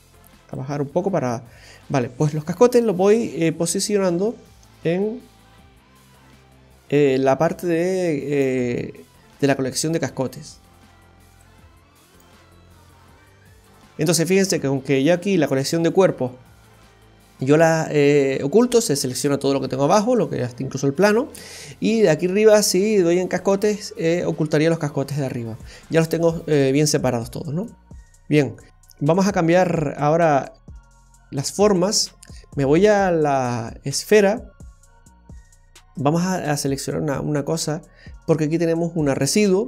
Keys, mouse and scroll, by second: 1.9 click, 6.7 click, 11.3 click, 13.6 click, 17.5 click, 20.0 click, 23.4 click, 25.9 click, 27.4-27.9 scroll down 2, 27.7 scroll up 2, 27.9 scroll down 1, 28.3 middle click, 28.6-29.5 scroll up 4, 29.5 shift+middle click, 31.4 scroll down 1, 33.3 space.